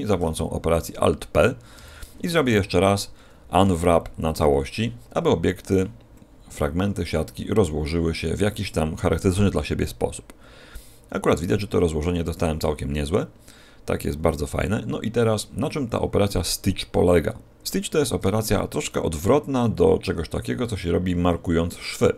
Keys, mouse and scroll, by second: 1.7 a, 2.3 a, 3.6 u, 5.2-5.5 scroll down 2, 15.1-15.7 scroll up 1, 15.7-16.6 scroll up 2, 16.6 middle click.